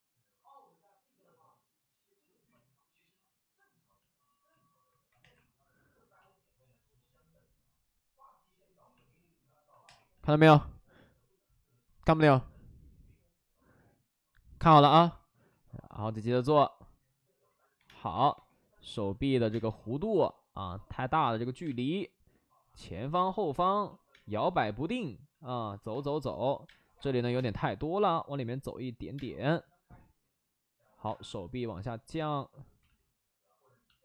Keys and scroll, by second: 5.1 2, 10.4 2, 17.7 3, 17.8 space, 18.0 3, 18.2 3, 19.4 space, 21.5 space, 24.0 space, 25.8-27.3 typing, 29.1 space, 31.0 space, 32.7 ctrl+z.